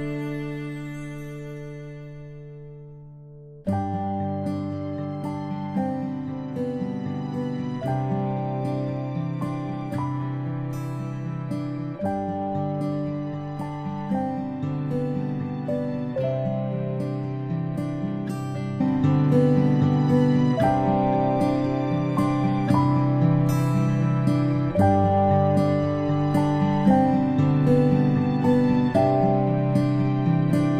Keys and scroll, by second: 4.9 space, 5.1 space, 5.7 ctrl+space, 7.9 space, 10.4 space, 10.7 space, 11.8 space, 12.1 space, 29.4-29.9 ctrl+shift+space.